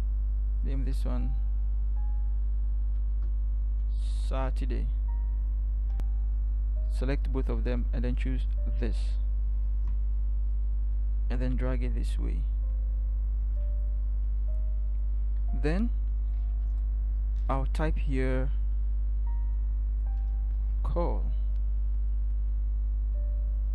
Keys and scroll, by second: 0.0 ctrl+c, 3.8 ctrl+v, 16.7 t, 20.6 ctrl+c.